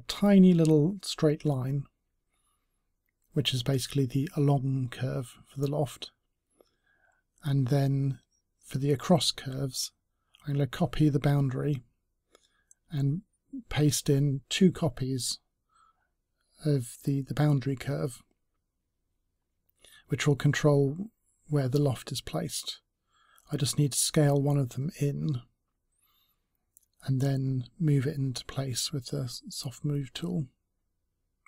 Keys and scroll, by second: 7.0 ctrl+c, 20.6-21.4 typing.